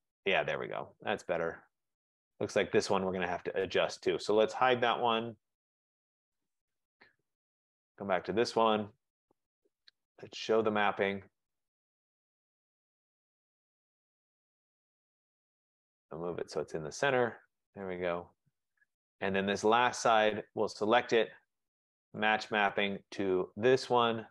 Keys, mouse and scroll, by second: 0.5 middle click, 1.0-1.4 scroll up 3, 1.4-1.9 scroll down 2, 2.7 right click, 6.6 click, 8.1 click, 9.0 middle click, 12.0 click, 17.2 click, 19.2 right click, 20.3 click, 22.4 click, 23.7 click.